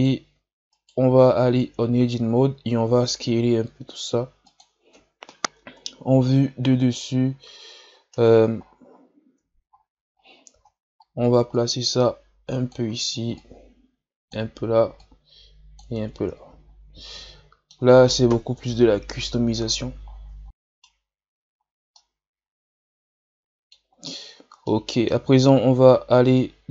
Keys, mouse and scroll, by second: 1.6 Tab, 2.2 a, 2.5 a, 3.3 s, 5.6 KP_7, 7.3 scroll down 1, 7.9-9.0 scroll down 15, 9.0-11.5 scroll up 16, 11.5-16.1 drag, 16.1 Tab, 16.5 a, 16.7-17.1 scroll down 2, 17.1-18.6 middle drag, 18.6 KP_3, 19.6-20.4 scroll up 12, 20.4-24.2 middle drag, 24.2-24.7 scroll up 2, 24.7-25.5 middle drag, 25.5-26.7 scroll up 1.